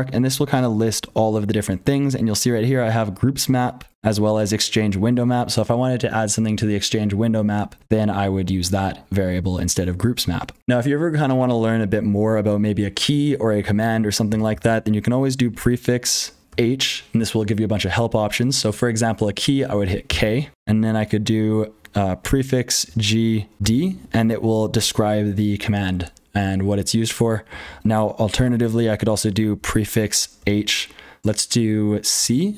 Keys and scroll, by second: 0.0-32.5 typing, 10.6 F12, 15.4 ctrl+z, 22.1 ctrl+z, 27.6 ctrl+g, 29.5 ctrl+z.